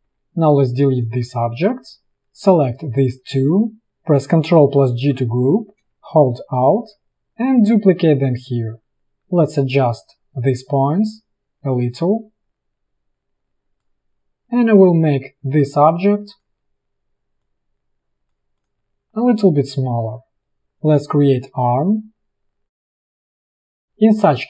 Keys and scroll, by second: 0.2 Delete, 5.0 ctrl+g, 9.1 a.